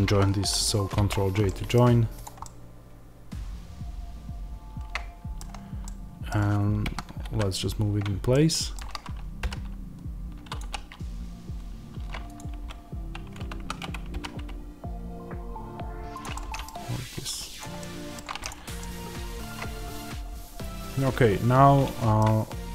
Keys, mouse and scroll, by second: 0.9 ctrl+j, 1.4 middle click, 1.7-2.1 scroll down 2, 2.1 click, 2.3-10.5 middle drag, 6.7 KP_1, 9.3 g, 10.5 click, 12.2 click, 12.4 h, 13.4 ctrl+z, 14.0 g, 16.1 click, 16.2-17.5 middle drag, 16.5 scroll, 17.5 click, 17.7 middle click, 18.3 click, 18.7-22.7 middle drag.